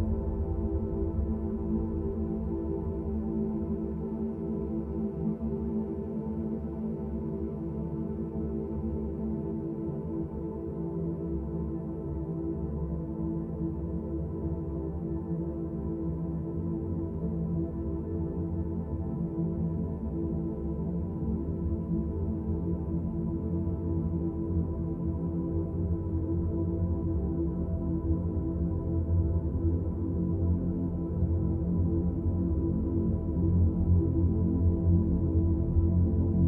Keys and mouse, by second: 0.5 Delete, 7.1 click, 10.0-11.7 drag, 14.3 k, 17.0 ctrl+shift+z, 17.7 click, 19.3 click, 20.0 shift+click, 20.5 shift+click, 21.1 shift+click, 22.3 Delete, 23.9 2, 24.2 click, 27.2 shift+click, 29.2 shift+click, 31.9 1, 32.4 click, 35.4-36.4 drag.